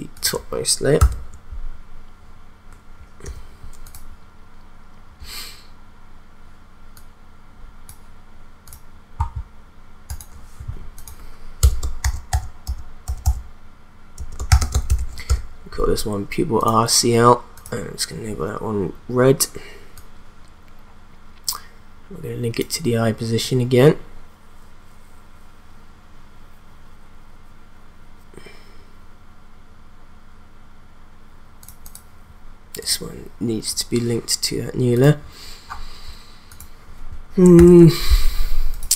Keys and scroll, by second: 1.0 ctrl+v, 3.2 u, 11.6 Return, 11.8-15.5 typing, 37.5 ctrl+s.